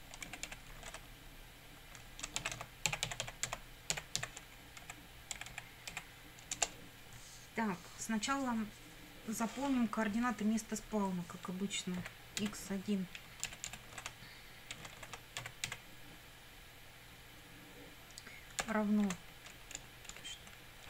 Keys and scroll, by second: 0.0-0.3 typing, 2.2-4.7 typing, 4.8 Right, 6.6 Return, 12.0 x, 12.4 1, 13.5 BackSpace, 15.4 x, 15.7 1, 18.6 -, 19.1 space, 19.8 BackSpace.